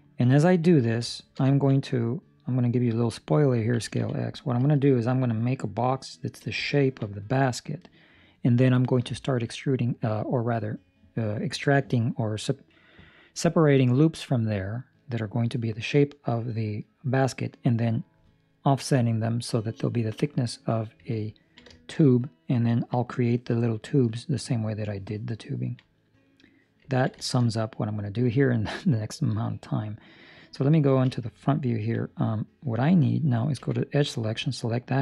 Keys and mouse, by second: 0.3 ctrl+middle click, 1.0 shift+middle click, 1.4 ctrl+middle click, 1.7 middle click, 3.7 s, 6.6 ctrl+middle click, 21.3 ctrl+middle click, 21.7 shift+middle click, 21.9 middle click, 22.6 ctrl+middle click, 25.5 ctrl+middle click, 25.8 middle click, 26.8 ctrl+middle click, 27.1 shift+middle click, 27.5 middle click, 31.0 KP_1, 31.6 ctrl+middle click, 33.5 2, 33.9 right click, 34.5 ctrl+middle click.